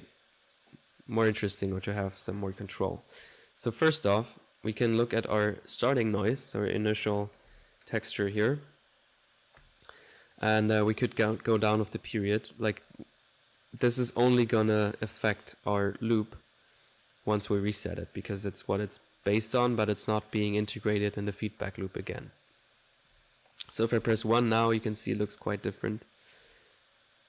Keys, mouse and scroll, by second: 0.9 click, 4.0 click, 4.7 middle click, 9.6 click, 11.0-15.2 drag, 15.4 middle click, 15.8 click, 16.8 click, 17.2 middle click, 17.5 ctrl+1, 19.1 click, 20.1 middle click, 22.2 click, 22.9 middle click, 23.1 1, 25.4-27.2 drag, 25.4 typing.